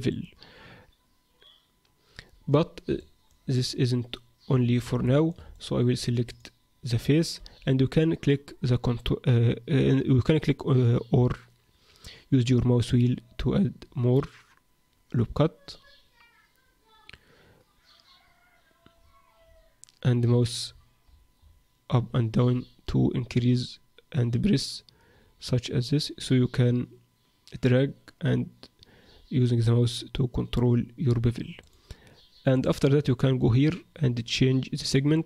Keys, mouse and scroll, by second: 2.9 middle click, 3.5 middle click, 5.1 shift+middle click, 5.5 shift+middle click, 6.3 click, 7.3 ctrl+b, 32.5 click, 35.1 click.